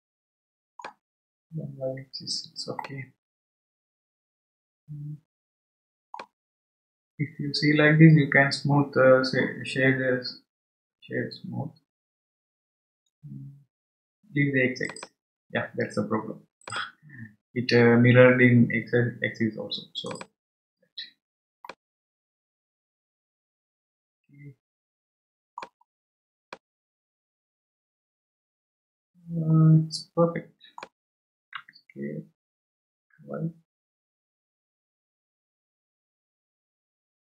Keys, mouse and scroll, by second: 1.5-2.8 scroll down 2, 2.8-5.9 middle drag, 6.6 scroll up 2, 7.3-10.0 scroll up 1, 11.1-14.1 scroll down 1, 14.9 click, 16.7 click, 20.1 click, 21.7-24.8 middle drag, 25.9 scroll down 2, 26.5-29.5 middle drag, 31.5 s.